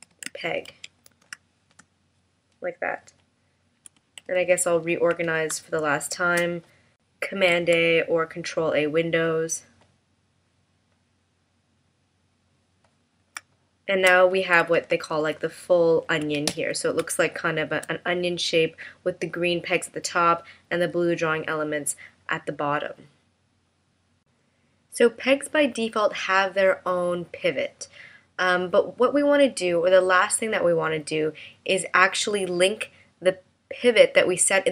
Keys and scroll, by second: 7.5 super+a, 13.4 space, 14.8 super+=, 17.1 space.